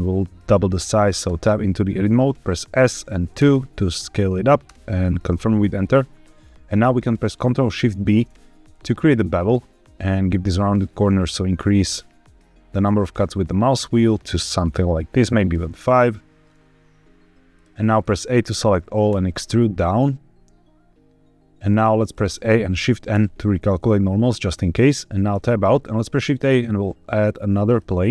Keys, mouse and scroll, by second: 1.3 Tab, 2.7 s, 3.3 KP_2, 4.6 KP_Enter, 5.5 middle click, 7.9 ctrl+shift+b, 9.3-10.9 scroll up 1, 11.5-12.0 scroll up 1, 14.6-17.4 scroll up 1, 17.4 click, 17.7 middle click, 18.0 a, 19.0 e, 21.6 click, 22.0 a, 23.0 shift+n, 24.5 middle click, 25.2 Tab, 26.1 shift+a.